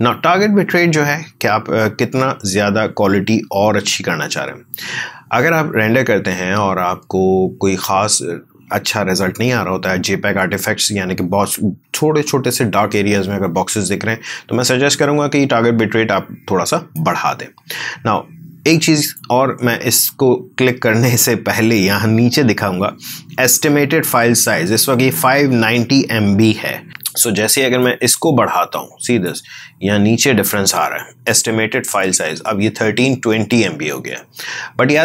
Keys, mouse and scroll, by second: 16.9-21.4 drag, 27.7-35.0 drag.